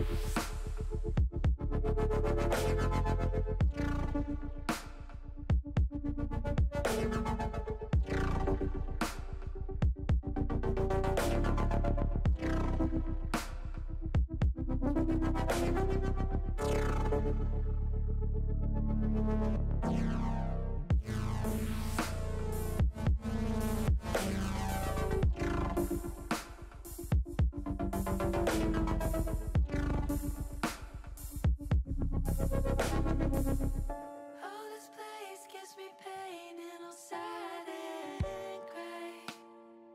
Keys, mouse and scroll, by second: 3.4 s, 4.1 click, 5.5-6.8 drag, 7.1 click, 8.0 shift+middle click, 9.5 shift+middle click, 10.0-11.3 middle drag, 11.8 ctrl+z, 12.8 click, 14.1 KP_1, 16.1 KP_3, 17.7 click, 19.1 KP_1, 21.3 shift+middle click, 21.8 middle click, 22.7 middle click, 23.7 shift+middle click, 25.2 shift+middle click, 26.9 Tab, 27.8 click, 29.7 click, 30.8 click, 34.0 KP_1, 35.9-37.3 middle drag, 38.0 click.